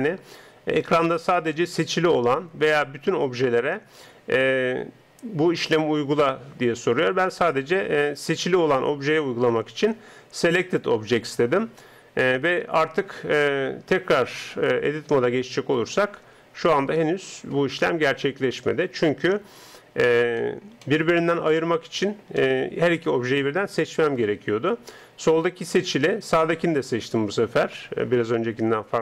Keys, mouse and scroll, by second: 14.8 Tab, 15.8 right click, 19.2 Tab, 20.4-26.6 middle drag, 26.6 right click.